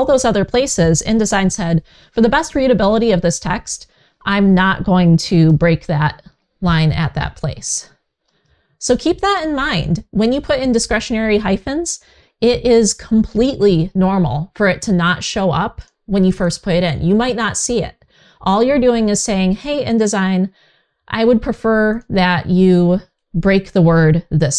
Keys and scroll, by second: 2.6 super+z, 5.1 super+z, 7.9 super+z, 23.2 Right.